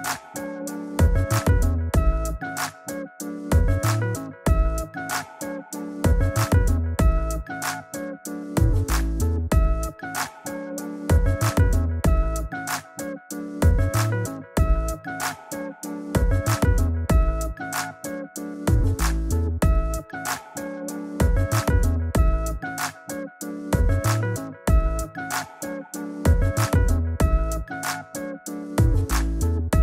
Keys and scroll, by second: 6.3 super+j, 7.0 super+v, 22.8 super+t.